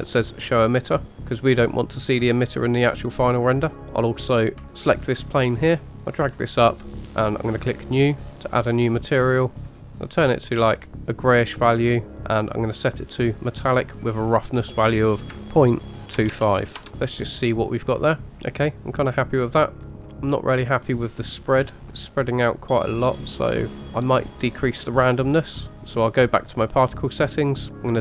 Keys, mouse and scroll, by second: 0.9 click, 4.6 click, 5.9 click, 7.6 click, 9.6-11.9 drag, 12.7 click, 14.2-16.8 drag, 19.9 drag, 20.2-20.7 middle drag, 20.8-21.8 scroll down 2, 21.8 click, 21.9-23.8 middle drag, 25.7-26.8 scroll down 2, 26.8-27.9 scroll down 4.